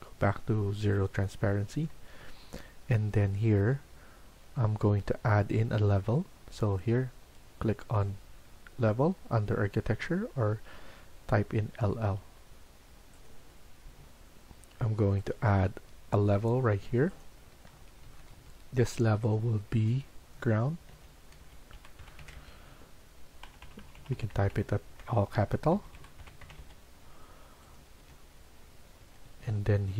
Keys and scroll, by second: 1.8 Escape, 2.1 Escape, 17.6 Escape, 18.0 Escape, 18.3 Escape, 20.6-29.9 typing.